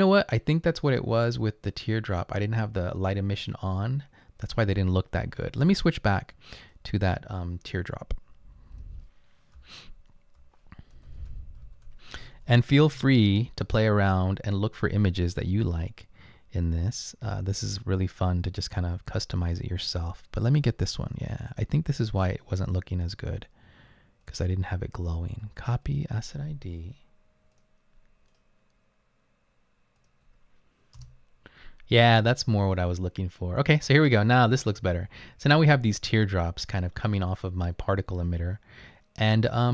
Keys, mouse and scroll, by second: 9.6-13.2 typing, 17.1-18.0 typing, 27.5 right click, 28.3 right click, 30.0 click, 31.1 Return.